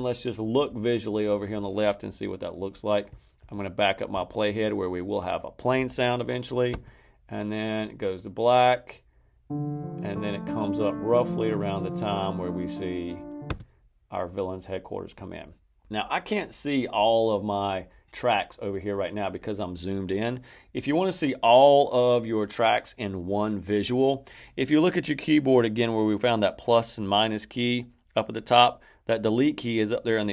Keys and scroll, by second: 6.6 space, 13.4 space.